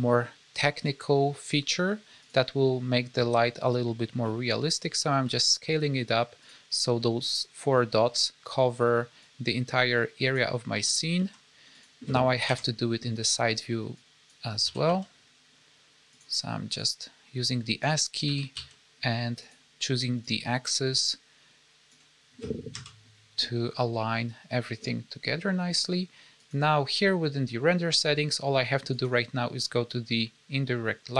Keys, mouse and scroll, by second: 3.3-4.3 scroll up 4, 4.3-5.1 scroll down 1, 5.1 s, 9.1 click, 10.7 s, 12.4 KP_1, 13.9 click, 14.5 s, 16.7 click, 18.2 s, 20.1 click, 22.6 KP_3, 26.3 click, 28.8 click, 30.5-31.1 scroll down 4.